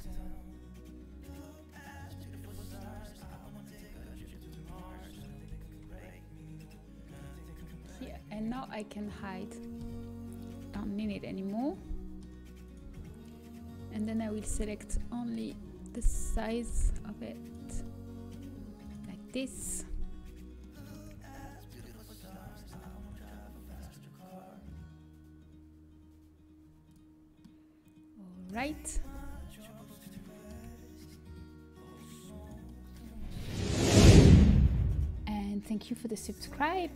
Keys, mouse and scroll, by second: 1.3-3.3 right drag, 3.3 KP_7, 3.7 z, 6.4 g, 7.3 click, 7.3 g, 7.5 z, 8.5 Tab, 9.4-12.5 middle drag, 12.5 h, 12.6-17.8 middle drag, 12.8 Tab, 14.6-16.0 drag, 14.6-16.0 right drag, 17.8-19.6 right drag, 19.6 KP_7, 25.2 ctrl+b, 27.4-29.3 middle drag, 29.0 a, 30.2 middle click, 32.0-33.7 drag, 32.4-33.7 middle drag, 32.4-36.2 right drag.